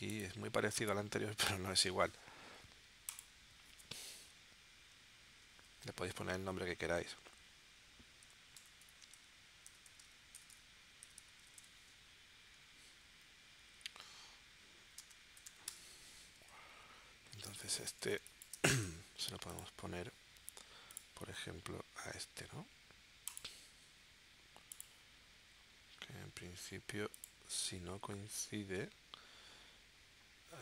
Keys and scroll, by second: 8.2 shift+c, 8.6 shift+BackSpace, 8.8 shift+p, 9.9-12.1 typing, 15.0 space, 15.3 0, 15.6 Return, 17.5 space, 18.3 space, 18.8 v.